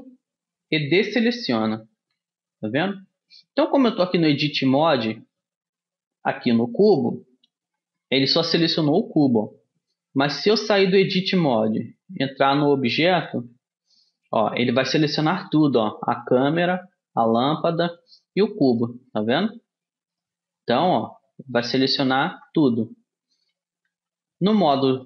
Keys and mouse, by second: 0.0 a, 2.0 a, 3.9-10.6 middle drag, 10.6 a, 12.0 Tab, 13.4 a, 14.0 a, 18.8-21.8 right drag, 22.4 a, 22.7 a, 24.0 a.